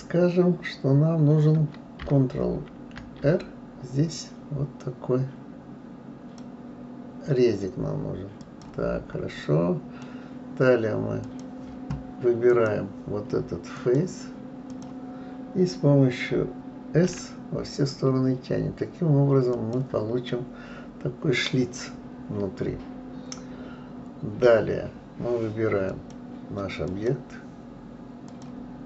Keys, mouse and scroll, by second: 2.7 ctrl+r, 9.3-11.2 middle drag, 11.2 click, 12.5 click, 13.7 click, 14.7 click, 17.1 s, 20.3-23.3 middle drag, 25.9 click, 26.9 click.